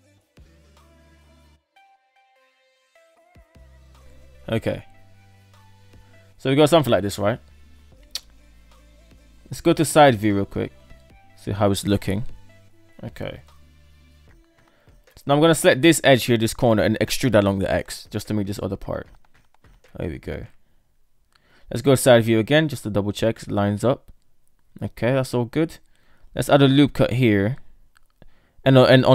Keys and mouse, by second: 0.1 right click, 0.3-3.6 typing, 1.9 alt+z, 3.1 shift+middle click, 4.0 right click, 4.7 shift+middle click, 4.9 Tab, 5.5 alt+z, 8.2 Tab, 8.6 KP_3, 9.5 Tab, 9.7 KP_3, 10.3 Tab, 11.5 Tab, 11.8 KP_7, 12.5 Tab, 13.3 shift+middle click, 13.4 shift+click, 13.5 shift+middle click, 14.5 KP_1, 14.9 right click, 15.3 shift+right click, 17.0 e, 19.1 middle click, 19.3 click, 19.6 middle click, 20.0 middle drag, 20.5 Tab, 20.7 KP_3, 21.3 Tab, 22.5 Tab, 22.7 KP_7, 23.2 Tab, 24.1 shift+middle drag, 24.7 shift+middle click, 26.3 ctrl+r.